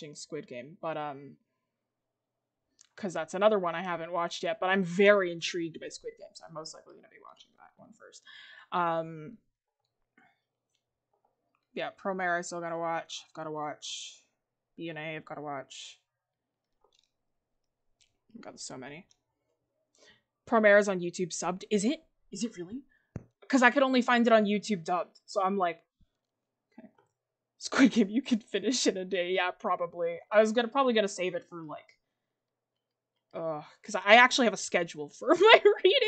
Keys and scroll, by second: 9.7 ctrl+z, 26.8 ctrl+z.